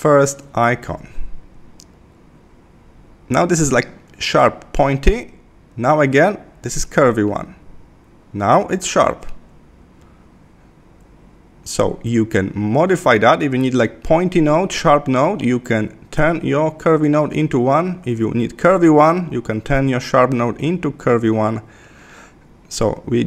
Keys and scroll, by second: 9.4 Left.